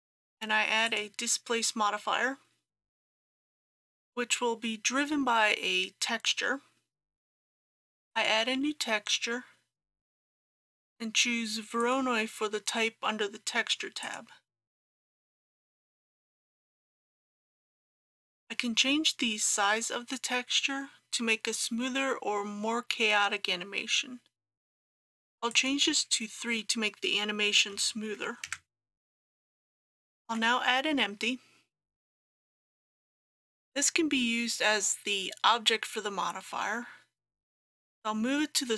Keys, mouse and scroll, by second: 27.8 KP_3, 29.6 click, 30.3 shift+a, 32.1 click.